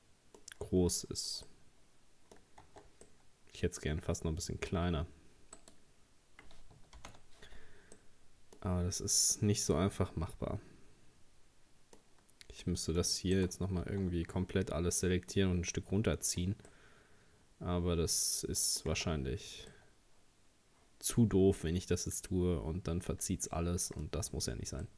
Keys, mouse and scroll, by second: 1.4 scroll up 1, 2.5 scroll up 1, 2.7 Tab, 3.1-5.6 middle drag, 5.6 right click, 7.0 ctrl+z, 8.0-12.4 middle drag, 12.7 middle click, 13.4 shift+right click, 16.3-16.7 scroll down 1, 16.7-18.9 middle drag, 18.9 Tab, 19.3-19.7 scroll down 2, 19.7-22.7 middle drag, 24.1-24.8 scroll up 2, 24.8-24.9 middle drag.